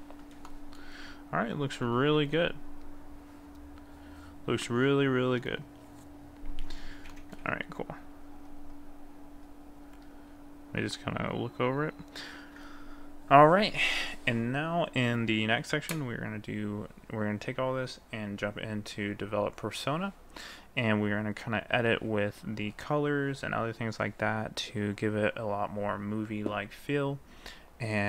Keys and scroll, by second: 1.9 ctrl+s.